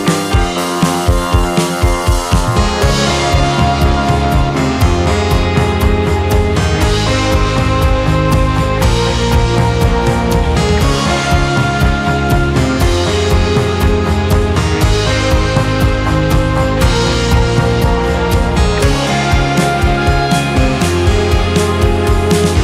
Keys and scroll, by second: 2.2 space, 5.1 2, 5.9 space, 8.1 ctrl+d, 15.8 2, 16.2 ctrl+s, 21.6-21.9 typing.